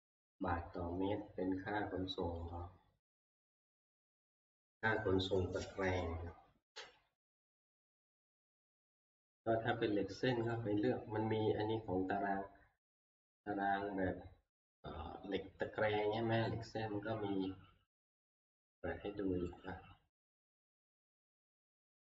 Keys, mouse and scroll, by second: 2.5 click, 3.8 click, 8.0 click, 10.5 click, 12.0 scroll, 19.6 click, 21.3 click.